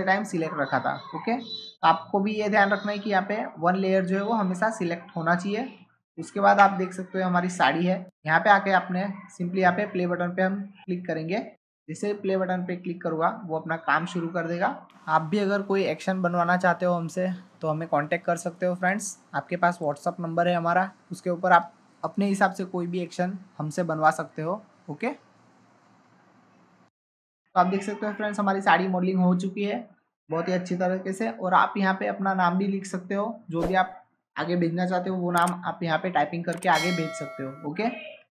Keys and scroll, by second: 6.5 ctrl+Tab.